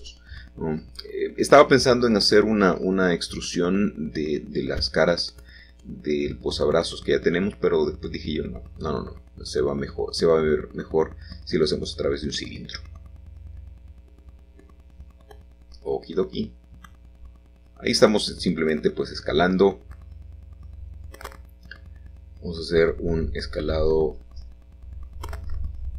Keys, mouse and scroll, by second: 0.0-0.8 typing, 1.3 Return, 5.2 middle click, 6.0 g, 6.2 y, 7.9-9.0 drag, 9.0 s, 9.8 y, 13.5 click, 14.2 g, 15.4 y, 17.1-18.2 drag, 20.1 middle click, 22.2 s, 22.6 shift+z, 23.8 Escape.